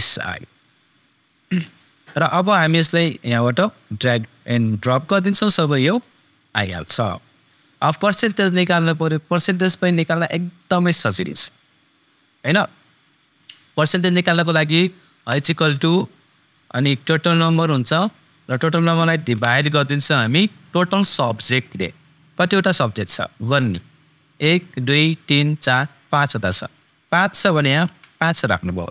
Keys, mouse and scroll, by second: 3.2-6.7 super+drag, 9.2 super+click, 15.1 super+=, 17.5 super+click.